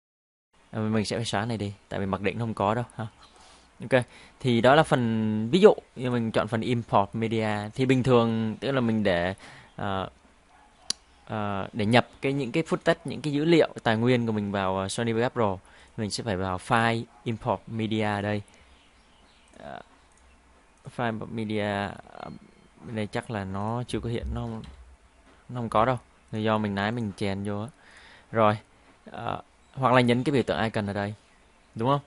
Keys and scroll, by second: 24.6 ctrl+i.